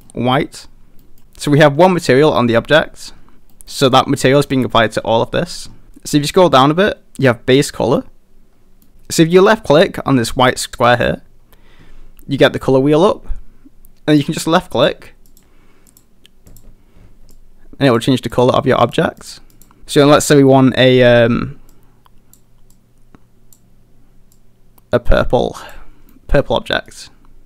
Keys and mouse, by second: 1.0 middle click, 3.5 middle click, 8.8 middle click, 10.9 click, 26.1-26.4 middle drag, 26.9-27.4 middle drag.